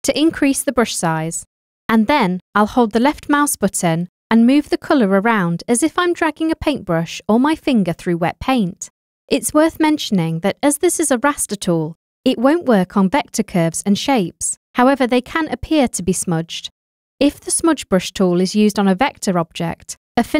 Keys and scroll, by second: 1.6 ].